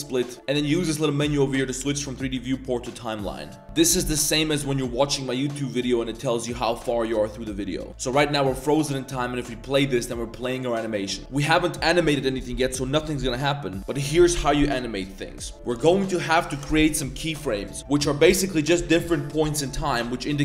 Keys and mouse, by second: 0.7-2.9 drag, 4.3-7.9 drag.